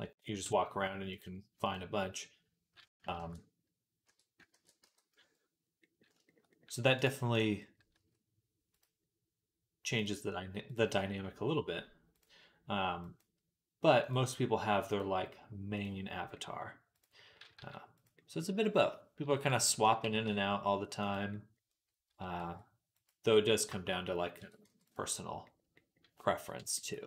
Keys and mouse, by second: 1.0-3.0 drag, 1.0-3.0 middle drag, 3.0 ctrl+a, 4.4 ctrl+a, 7.8 s, 8.6-9.8 right drag, 13.0 right click, 16.8-27.0 right drag, 17.4 s, 19.1 s, 19.9 g, 21.9 s, 24.2 s, 26.7 Tab.